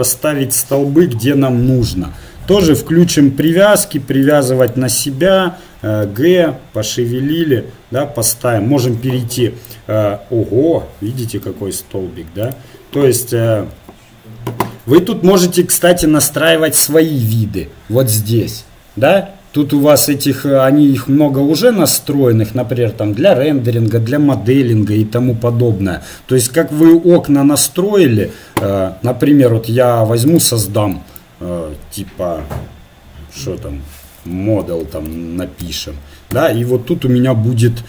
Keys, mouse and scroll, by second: 2.6-6.2 drag, 6.1 g, 8.9 KP_0, 12.6-14.2 drag, 13.8 t, 16.5-22.3 drag, 30.4-36.3 drag.